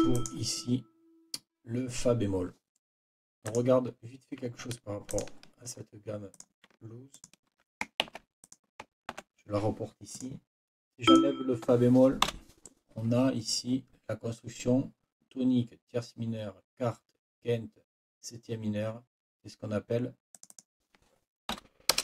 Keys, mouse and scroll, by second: 3.5 click, 5.1 shift+click, 6.3 click, 7.1 shift+click, 8.0 ctrl+shift+c, 8.4 ctrl+click, 9.1 ctrl+v, 10.1 click, 11.1 click, 12.2 Delete, 20.3 click, 21.5 End, 21.9 BackSpace.